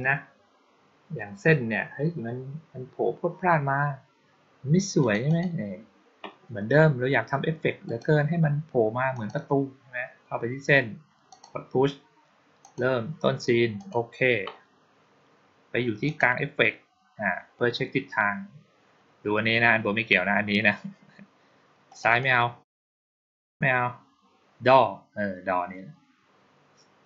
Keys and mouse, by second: 4.9 click, 5.1 click, 7.7 click, 9.0 click, 11.2 click, 12.5 click, 13.6 click, 15.9 click, 21.7 click, 22.0 click, 23.1 click, 23.3 click.